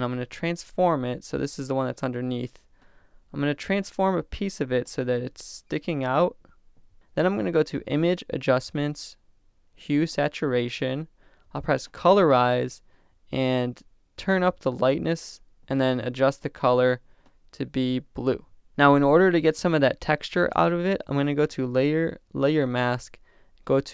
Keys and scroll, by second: 0.1 super+t, 6.8 Return.